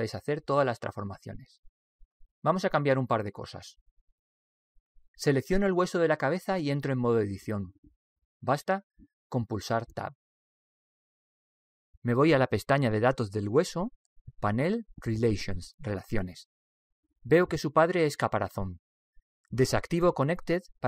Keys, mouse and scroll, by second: 3.0-7.4 middle drag, 7.4 right click, 8.7 Tab, 14.6-17.6 drag.